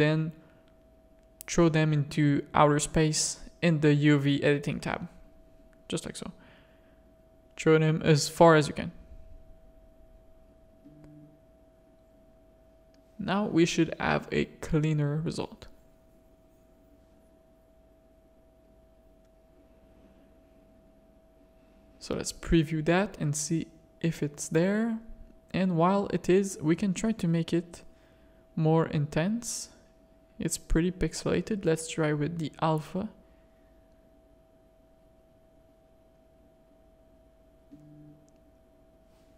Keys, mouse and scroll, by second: 0.8 click, 3.6 a, 4.4 g, 9.2 g, 11.4 Tab, 11.9 alt+a, 12.7 click, 13.6 shift+click, 16.0 click, 16.9 middle click, 18.3-19.4 drag, 19.7 middle click, 23.4-23.8 middle drag, 25.3 middle click, 26.4 middle click, 27.5-29.6 drag, 29.8 click, 31.0-32.4 drag, 33.9-34.5 middle drag, 35.3-36.6 drag, 37.0 shift+click, 38.2-39.3 drag.